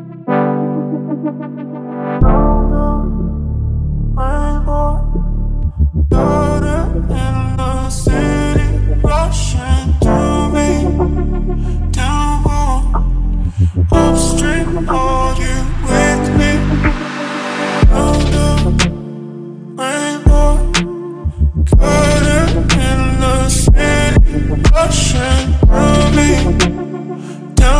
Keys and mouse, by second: 0.0-2.2 middle drag, 2.2 shift+d, 2.4 y, 3.7 middle click, 4.5 ctrl+middle click, 4.9 shift+middle click, 5.7 shift+middle click, 13.1-15.2 drag, 15.6 middle click, 16.3 ctrl+middle click, 17.6-20.6 drag, 21.8 ctrl+middle click, 22.3 shift+middle click, 22.6 middle click, 23.4 shift+middle click, 24.2 right click, 25.4 shift+d, 27.5 x.